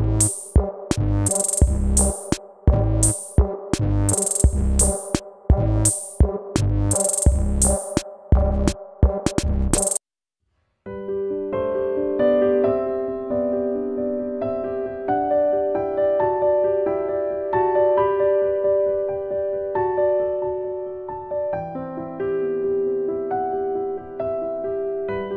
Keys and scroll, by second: 0.7 ctrl+s.